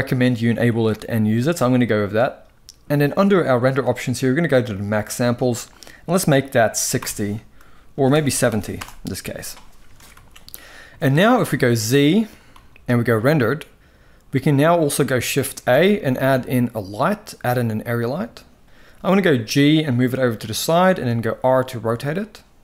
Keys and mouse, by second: 4.5-8.4 drag, 7.8 BackSpace, 9.7 ctrl+s, 9.8 ctrl+s, 10.7 shift+middle click, 12.2 z, 15.2 shift+a, 18.8 g, 20.7 r.